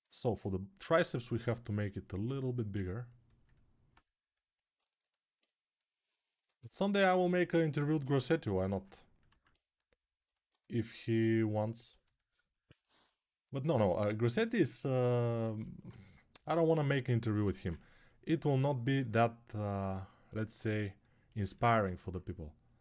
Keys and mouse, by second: 0.7 g, 3.2-7.6 alt+right drag, 9.1 alt+q, 11.9-17.0 shift+right drag, 17.2 g.